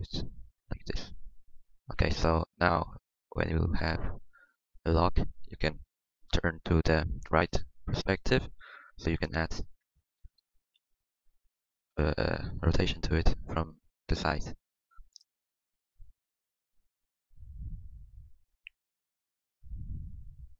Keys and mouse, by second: 1.6 r, 6.3-7.6 middle drag, 6.3 KP_3, 11.6-15.9 drag, 15.9-18.0 middle drag, 18.0 click, 18.8-20.5 middle drag.